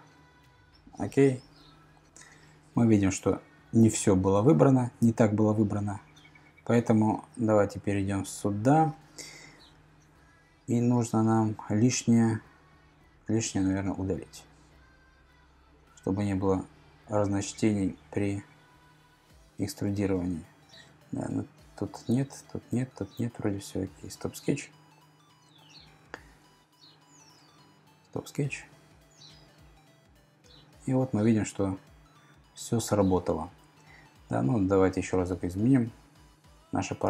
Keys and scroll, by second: 10.2 t.